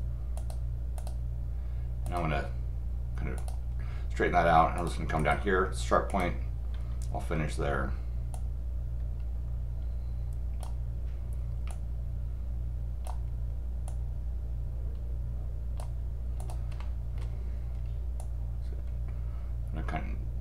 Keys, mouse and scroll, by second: 0.3 click, 1.0 click, 2.0 click, 3.4 click, 4.8 click, 5.2 right click, 6.1 click, 8.3-10.6 drag, 11.7-13.0 drag, 13.9 click, 16.4 click, 16.8 middle click, 18.2-20.4 drag.